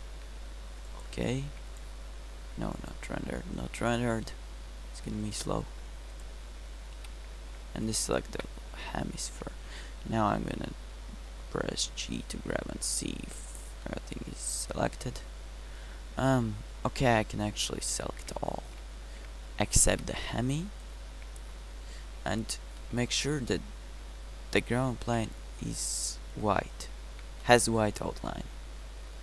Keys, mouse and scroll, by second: 7.3 b, 10.4 g, 18.4 a, 18.9 a, 20.3 b.